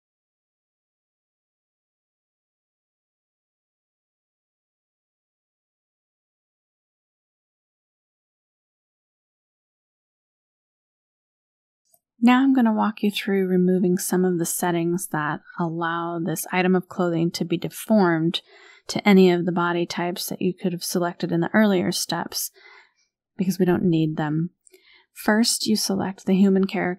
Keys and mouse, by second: 1.5 click, 2.3 middle click, 3.5 click, 6.4-7.4 middle drag, 7.6 click, 9.4 click, 12.6 KP_1, 12.9 KP_Decimal, 14.2 click, 14.7 KP_1, 14.9 KP_Decimal, 18.5 click, 20.4 click, 25.3 click.